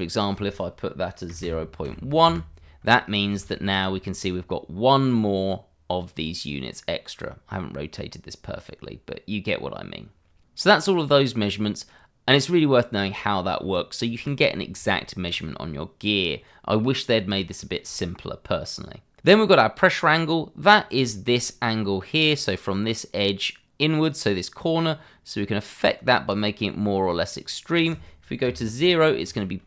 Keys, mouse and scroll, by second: 1.3 KP_0, 1.8 KP_1, 2.2 KP_Enter, 3.0 scroll up 1, 3.3 shift+z, 3.7 shift+middle click, 4.0 scroll up 1, 9.5 scroll down 1, 10.5 shift+z, 10.8 scroll down 1, 11.5 shift+middle click, 11.6 middle click, 11.7 shift+middle click, 12.2 middle click, 14.3 click, 14.7 scroll up 1, 15.1 shift+middle click, 15.7 middle click, 15.8 scroll up 1, 20.7 scroll up 1, 22.2 scroll up 1, 24.8 click, 28.4 0, 28.6 Return.